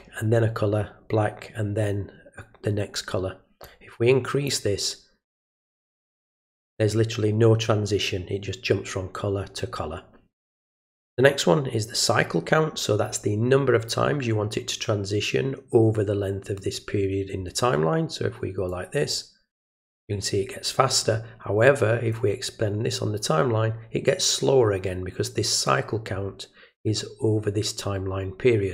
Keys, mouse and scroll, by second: 3.6-4.4 drag, 18.7 click, 22.1-23.1 drag.